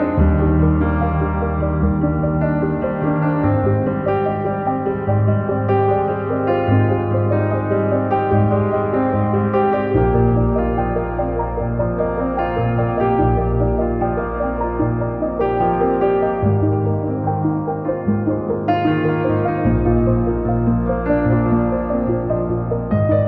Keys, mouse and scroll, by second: 0.6 click, 4.0 click, 5.0 scroll down 2, 5.3 KP_9, 5.4 scroll up 3, 5.5-6.1 scroll down 5, 5.6 KP_3, 5.9 KP_9, 6.1-6.9 scroll up 5, 6.5 click, 6.9-8.1 drag, 8.1 scroll down 1, 8.2 middle click, 8.3 click, 8.8 scroll down 1, 9.1 click, 9.6 middle click, 10.0 click, 10.6 middle click, 10.7 click, 10.9 middle click, 11.3 click, 12.5 middle click, 12.6 click, 13.4 middle click, 13.6 scroll up 1, 14.6 click, 14.8-15.2 scroll up 1, 15.2 click, 15.4 KP_1, 15.6 scroll up 1, 15.8 click, 16.0 scroll down 2, 16.1 click, 17.5 middle click, 18.3 click, 18.8 KP_1, 18.9 scroll up 6, 19.0 scroll down 1, 19.1 click, 19.8 scroll down 2, 19.9 click.